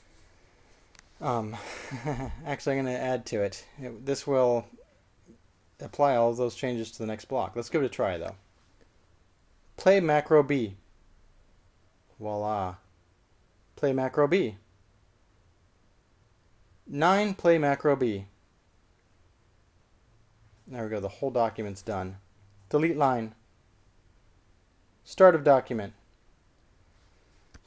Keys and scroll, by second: 11.6 typing, 18.9-19.6 typing, 23.8-24.5 typing, 26.3-27.1 typing.